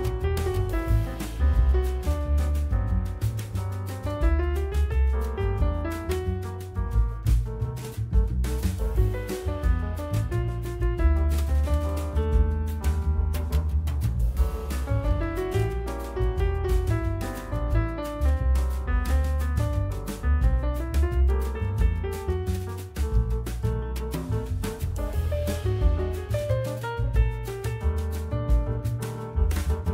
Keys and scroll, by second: 2.3 alt+1, 3.9 4, 12.4 alt+1, 15.8 F4, 16.8 F4, 18.3 F4, 20.1 F4, 20.3 1, 20.5 F3, 21.7 F3, 23.3 F4, 25.4 F4, 28.2 F4, 29.5 F4.